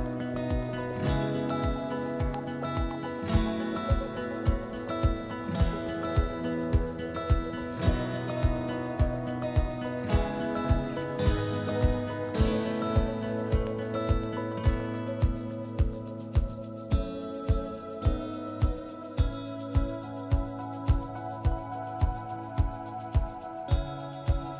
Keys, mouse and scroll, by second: 1.7 click, 2.8 click, 4.9 click, 4.9 typing, 6.1 click, 8.7 click, 10.4 click, 14.1 click, 15.4 click, 17.8 click, 19.4 click, 20.8 ctrl+click, 24.4 click.